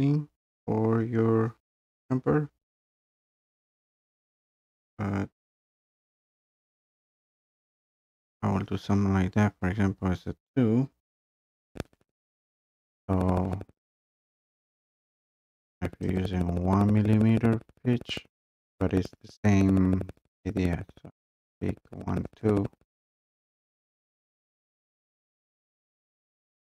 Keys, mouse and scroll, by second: 16.2 click, 22.4 click, 23.0 click, 23.2 click, 23.6 click, 23.8 click, 24.1 click, 24.4 click, 24.6 click, 24.6 click, 25.0 click, 25.9 click, 26.6 click.